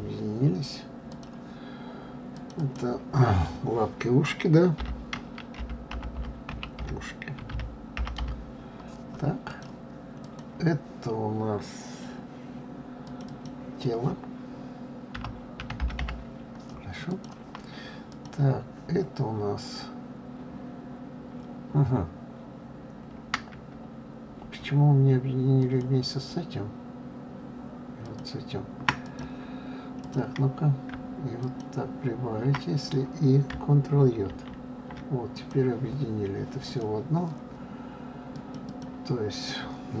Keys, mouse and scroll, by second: 1.1 click, 2.3 click, 2.5-5.6 drag, 10.2 click, 13.0 click, 13.3-16.3 drag, 18.1 click, 25.6 shift+click, 28.0 shift+click, 29.0 click, 30.0 click, 31.4 shift+click, 34.3 ctrl+j, 35.3 click, 36.6 click, 38.3 click, 38.6-40.0 drag.